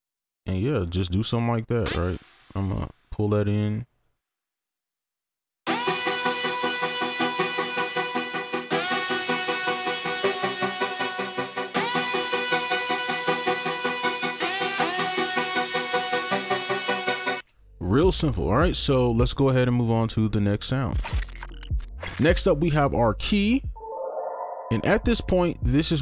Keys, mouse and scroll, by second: 0.2 shift+click, 1.4 shift+right click, 1.4 shift+click, 2.1 ctrl+click, 2.6 d, 4.1 right click, 5.6 space, 5.9 right click, 6.2 scroll up 1, 6.5 ctrl+z, 17.4 space, 23.9 double click.